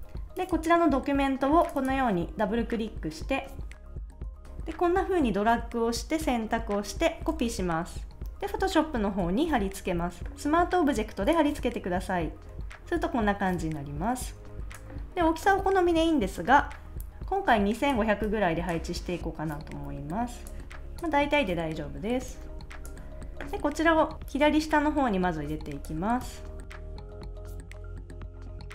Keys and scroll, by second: 7.3 super+c, 8.2 a, 9.5 super+v, 27.8 Return, 27.8 Down, 27.9 shift+Right, 28.2 Left, 28.4 super+s.